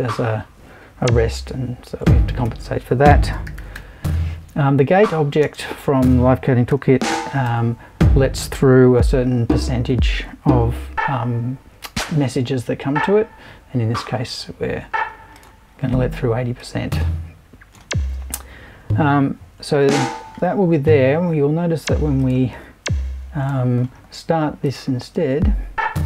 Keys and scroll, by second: 2.4 super+i, 3.2-4.2 typing, 5.4 space, 6.5-7.9 typing, 23.4 BackSpace, 24.1 super+BackSpace.